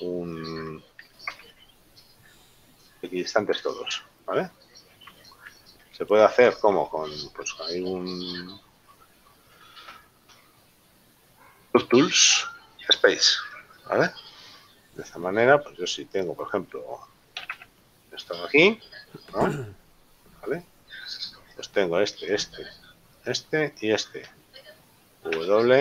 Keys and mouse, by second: 2.0 ctrl+KP_7, 6.4 KP_8, 10.1 w, 16.4 right click, 17.4 g, 19.8 middle click, 21.8 right click, 25.4 w.